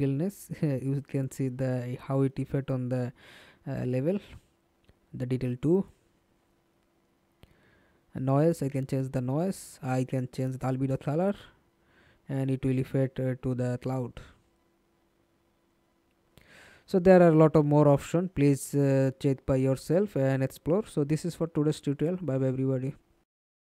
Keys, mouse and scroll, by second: 5.2-8.8 scroll down 3, 8.8-9.6 scroll down 4, 14.9-15.6 scroll down 9, 15.6-18.3 scroll down 7, 18.3 middle click, 23.1 alt+F9.